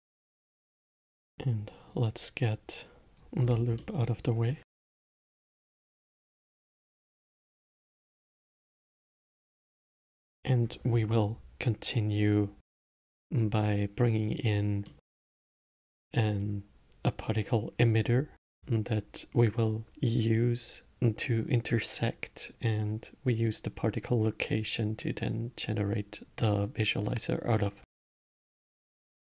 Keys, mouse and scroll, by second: 0.2 middle click, 0.8-1.4 scroll down 8, 1.4 middle click, 2.2 click, 3.8-4.1 scroll down 4, 4.1 middle click, 5.0 g, 7.3-8.1 scroll up 9, 8.1 scroll up 1, 8.9-9.7 middle drag, 9.7-12.1 scroll up 4, 15.2-18.2 middle drag, 28.2-28.8 alt+middle drag, 28.8-29.3 scroll down 2.